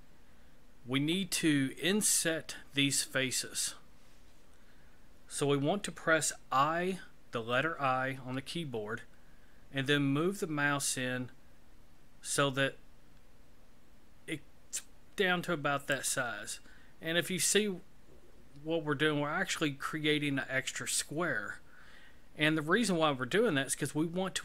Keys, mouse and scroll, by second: 16.6-20.2 scroll up 6.